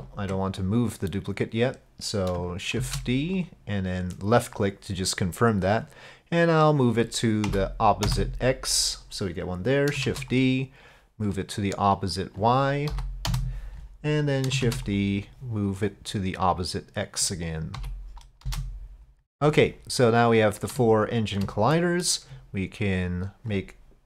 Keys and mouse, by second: 2.8 shift+d, 5.8-8.8 drag, 10.1 shift+d, 11.4-13.9 drag, 14.7 shift+d, 15.8-19.2 drag, 20.9-21.4 shift+drag, 21.8 middle click, 23.0 ctrl+click.